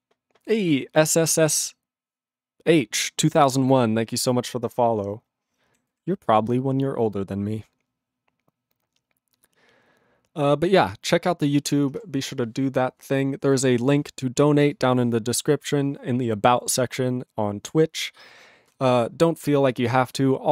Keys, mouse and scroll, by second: 6.3 ctrl+g, 14.8 click.